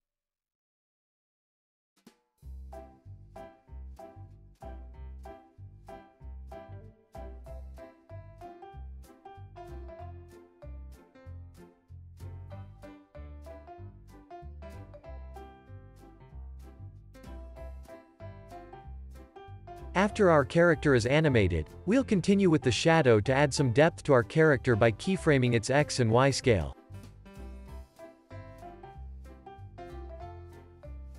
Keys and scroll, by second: 8.0 space, 21.1 super+s, 25.1 alt+z, 30.6 Escape.